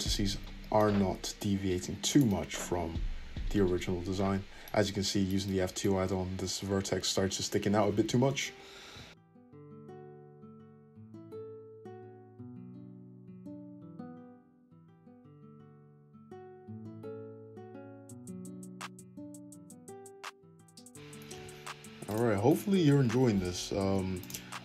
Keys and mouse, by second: 0.9 `, 5.5-18.4 drag, 7.7 `, 8.9 f, 10.6 ctrl+z, 11.8 g, 14.0 `, 17.5 Tab, 17.9 Tab, 20.4 click, 21.3 f, 22.4 click, 23.0 f.